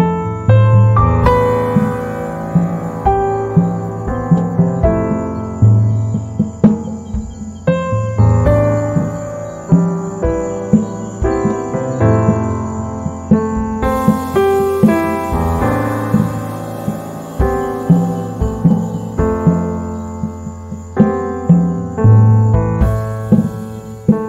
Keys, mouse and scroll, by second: 4.1 z, 4.3 right click, 4.5 space, 6.1 shift+click, 11.2 ctrl+z, 11.8 click, 15.1-18.2 drag, 18.2 right click, 18.6 z, 18.6 click, 19.0 space, 19.3-21.3 drag, 21.3 z, 21.4 right click, 21.6 space, 22.5 z, 22.6 click, 23.0 space, 23.9-24.2 drag.